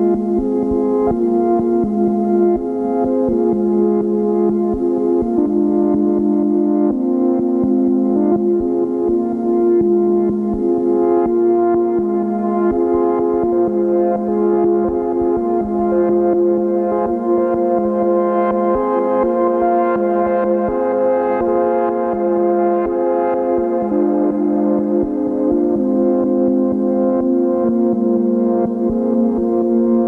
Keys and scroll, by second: 1.8 ctrl+k.